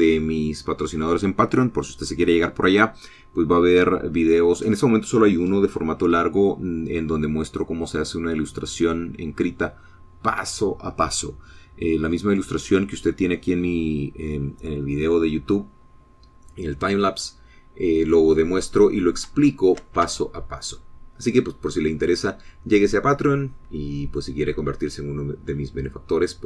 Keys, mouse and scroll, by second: 0.4-18.5 middle drag, 18.5-19.9 drag, 20.1-20.5 scroll up 1, 20.8 shift+middle click, 21.5 shift+Tab, 21.9-22.6 shift+scroll down 5, 22.7-25.7 middle drag, 25.9-26.4 scroll up 2.